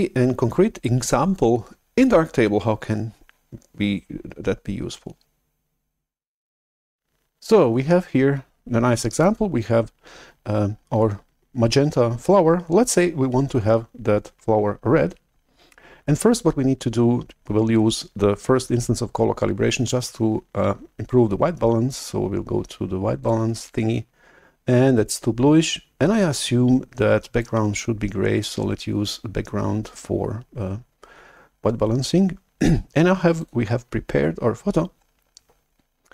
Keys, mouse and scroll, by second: 21.9-22.9 drag, 23.3-25.7 drag, 27.4-30.9 drag, 33.4-35.9 drag.